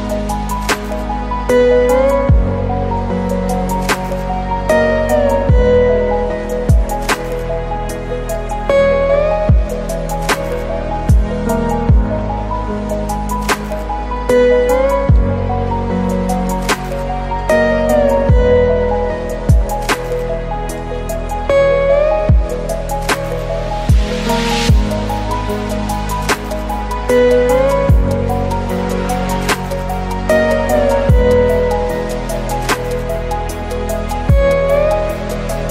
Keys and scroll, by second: 0.3 ctrl+space, 22.0 ctrl+space, 25.0 ctrl+i, 31.7 ctrl+space.